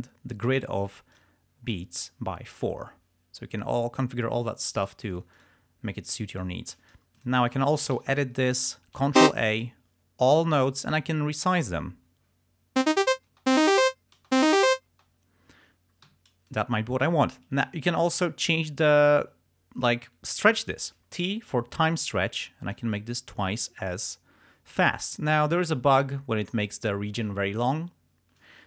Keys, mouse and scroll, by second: 1.2 click, 2.6 click, 4.9 click, 5.2 shift+right click, 6.1 shift+right click, 7.3 click, 8.1 e, 9.3 ctrl+a, 11.0 click, 13.0 space, 14.3 space, 16.2 g, 16.6 click, 21.2 t, 22.1-23.1 drag.